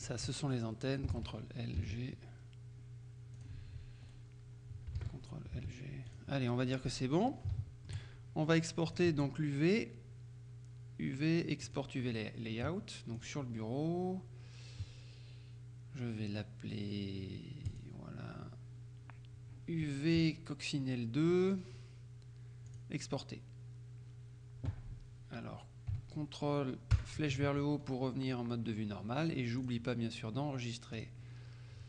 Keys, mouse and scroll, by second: 0.1 shift+right click, 1.2 ctrl+l, 3.5 click, 4.1 right click, 5.1 ctrl+l, 6.2 click, 6.6-7.1 scroll down 2, 7.2-7.7 scroll up 3, 7.7 shift+middle click, 9.0 click, 11.7 click, 13.2 click, 17.8 click, 22.8 click, 27.0 ctrl+Up, 29.7 click, 31.1 click.